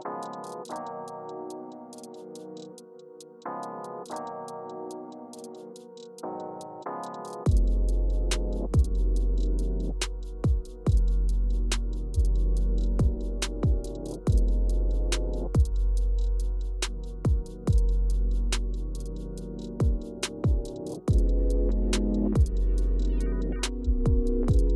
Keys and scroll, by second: 12.0 BackSpace, 19.0 Return, 20.3 BackSpace, 21.1 Return, 23.6 super+y, 24.4 super+y.